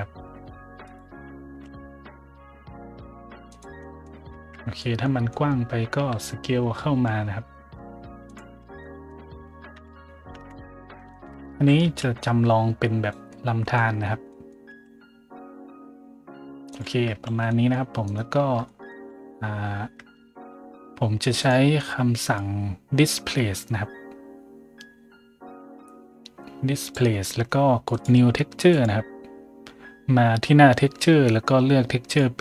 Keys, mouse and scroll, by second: 0.7 click, 1.2 middle click, 1.2-2.1 typing, 3.4 click, 3.7 scroll up 1, 4.2 Tab, 4.7 scroll up 1, 5.2 scroll up 1, 5.9 s, 6.9 y, 8.2 click, 8.5 Tab, 8.7 middle click, 9.7-12.2 typing, 10.7 middle click, 11.0 shift+middle click, 11.3 middle click, 12.1 click, 13.2 middle click, 13.9 middle click, 14.4-15.2 typing, 16.6 click, 17.2 a, 17.4 middle drag, 18.0 right click, 18.3 Tab, 18.6 scroll up 1, 19.0 a, 19.5 scroll down 1, 19.9 Tab, 21.3 click, 22.2 click, 26.8 click, 27.8 click, 28.6 click, 32.0 click.